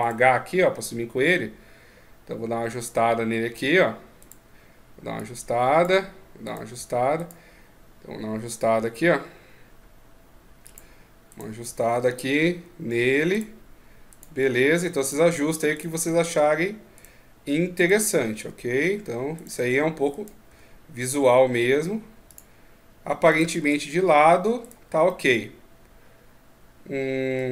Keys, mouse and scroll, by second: 0.6 click, 4.0 right click, 4.9 click, 6.2 right click, 6.9 right click, 8.1 g, 11.1 right click, 11.3 g, 13.8 right click, 14.1 g, 15.5 right click, 15.8 g, 17.5 right click, 18.1 g, 19.9 right click, 20.2 g, 23.0 right click, 23.3 g, 24.8 middle click.